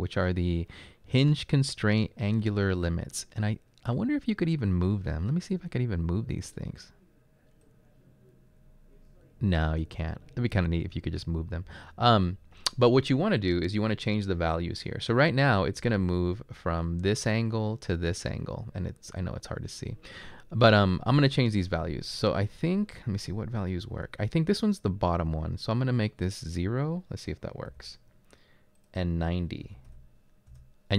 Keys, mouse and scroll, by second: 27.7 typing, 29.7-30.0 typing, 30.5 Return.